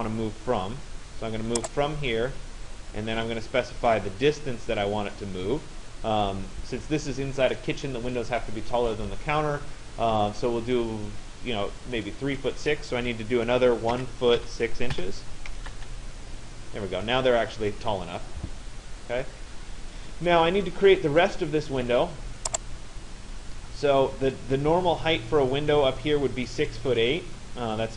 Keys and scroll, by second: 13.5 1, 15.7 Return.